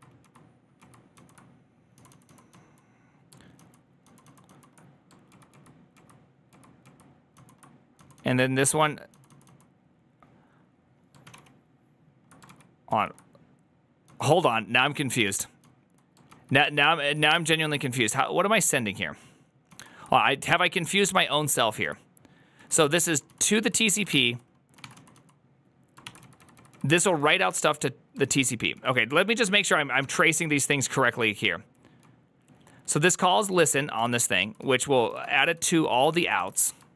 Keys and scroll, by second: 0.0-2.4 typing, 3.4 ctrl+j, 3.9 ctrl+j, 4.3 ctrl+j, 5.2 ctrl+k, 5.4 ctrl+k, 5.8 ctrl+k, 6.4 ctrl+k, 6.7 ctrl+k, 7.2 ctrl+j, 7.6-9.8 typing, 11.1 ctrl+w, 11.2 ctrl+o, 12.3 ctrl+k, 13.5 ctrl+k, 13.7-15.5 typing, 16.2 ctrl+k, 16.4 ctrl+j, 17.0 ctrl+j, 19.6 ctrl+j, 21.6 ctrl+u, 22.2-29.9 typing, 31.9-36.9 typing.